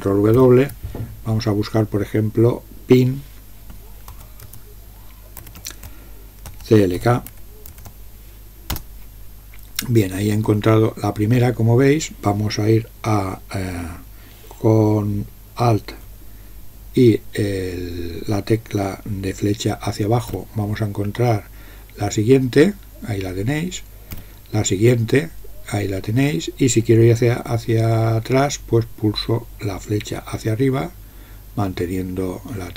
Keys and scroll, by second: 0.4 ctrl+w, 4.0-8.2 typing, 8.7 Return, 20.3 alt+Down, 24.2 alt+Down.